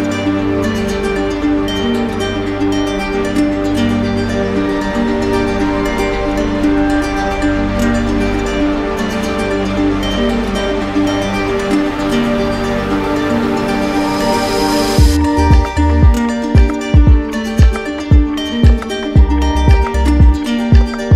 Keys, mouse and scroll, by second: 0.5 click, 0.9 click, 1.8 click, 3.2 click, 4.4 click, 5.5 click, 6.1 click, 6.9 click, 9.0 click, 10.2 click, 11.0 click, 12.2 click, 13.0 click, 14.1 click, 15.1 click, 16.1 click, 18.0 click, 19.4 click.